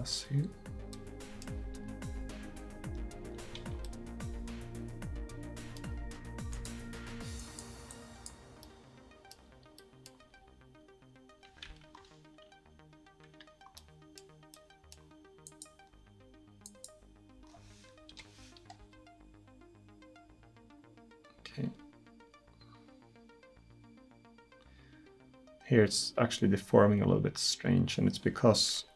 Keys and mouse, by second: 1.7 r, 6.6-9.2 drag, 9.2-9.7 middle drag, 10.3 r, 12.0-13.8 middle drag, 15.5-18.8 drag, 18.2 KP_1, 18.8 r.